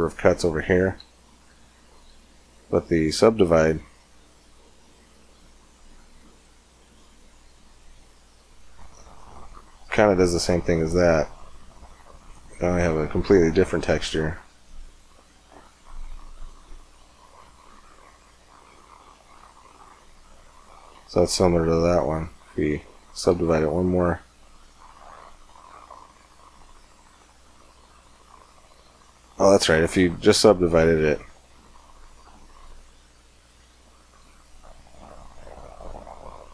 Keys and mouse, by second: 1.9 w, 6.6-8.5 middle drag, 8.5 Tab, 9.3 middle click, 10.3-11.6 middle drag, 13.4-15.0 middle drag, 14.1-19.7 drag, 19.7 middle click, 19.8 click, 19.9 middle click, 22.6 Tab, 23.1 w, 24.6 Tab, 25.4 click, 27.2 Tab, 28.0 Tab, 28.6 w, 30.8 Tab, 31.6 w, 34.4 Tab, 35.1-36.5 middle drag.